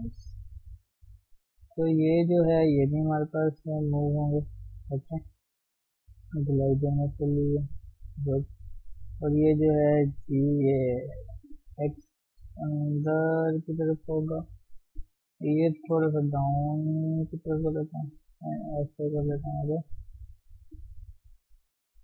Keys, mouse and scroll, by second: 0.1-1.1 middle drag, 1.1 shift+click, 2.9 shift+click, 3.1 middle click, 4.0 shift+click, 4.8 shift+middle click, 5.4 g, 6.8 g, 7.6-9.0 middle drag, 9.0 click, 9.2-10.3 middle drag, 10.3 g, 13.3-14.4 middle drag, 14.4 KP_3, 14.8-15.1 scroll up 2, 15.1 click, 15.9 g, 16.7-18.5 middle drag, 18.5 g, 19.8 g, 20.8 click, 21.1 g, 21.9 ctrl+z.